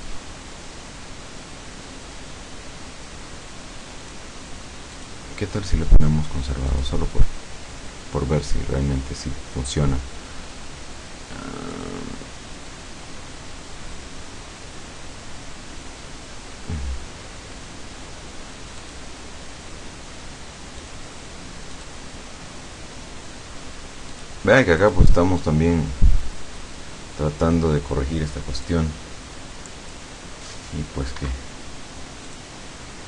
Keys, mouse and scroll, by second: 4.0 click, 5.0 click, 5.9 click, 6.7 click, 11.8 click, 18.8 click, 20.8 click, 21.8 click, 24.2 click, 24.9 click, 28.7-30.2 drag, 31.2 Escape, 32.4 click.